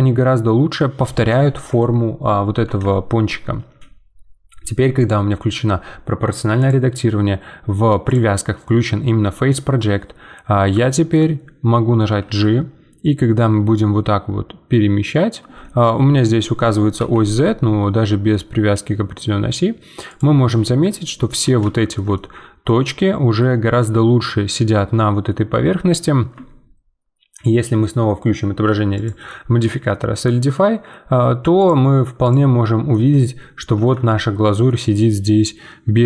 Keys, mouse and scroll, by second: 2.9 shift+middle click, 3.2 scroll up 1, 5.0-10.8 drag, 10.8-12.2 shift+middle drag, 12.2 g, 15.7 `, 17.0 g, 21.0-25.2 middle drag, 26.3 Tab, 28.9-33.1 drag, 33.1-34.6 middle drag, 34.6 scroll down 1, 34.6-36.0 middle drag.